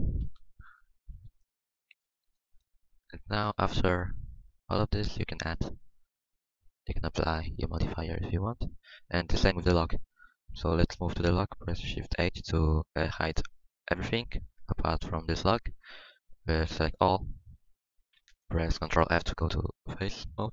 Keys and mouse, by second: 0.2 KP_1, 1.6 Tab, 1.8 Tab, 2.2 a, 9.7 Tab, 11.0 Tab, 13.2 shift+h, 16.6 Tab, 17.0 a, 19.0 ctrl+f, 19.0 a.